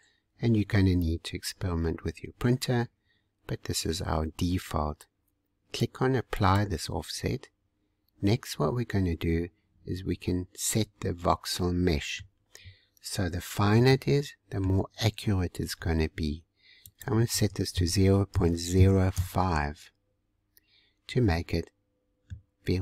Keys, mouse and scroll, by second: 1.0-1.3 scroll up 2, 1.8 scroll down 1, 6.3-9.4 drag, 10.2-10.7 scroll up 1, 10.7-12.9 middle drag, 12.9-13.9 scroll up 2, 13.9 shift+middle click, 14.8-15.8 scroll down 2, 15.8-16.8 scroll down 1, 16.8-20.0 drag, 20.7 scroll up 1, 21.3-22.6 middle drag, 22.6-22.8 scroll down 2.